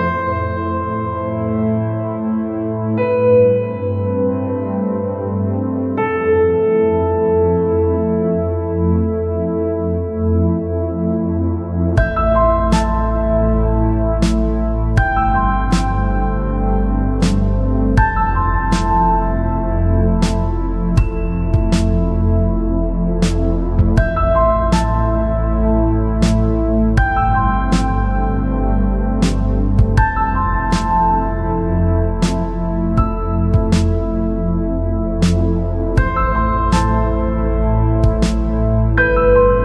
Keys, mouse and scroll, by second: 1.4-3.5 middle drag, 3.5-5.4 drag, 7.3-9.1 drag, 9.8-13.3 drag, 13.8 KP_1, 14.7-16.8 middle drag, 17.3-19.2 middle drag, 20.3-21.8 middle drag, 21.8-23.7 drag, 24.3-31.2 middle drag, 33.2-34.8 right drag, 33.9 Tab, 35.0 Tab, 36.8 alt+c, 39.2 Tab.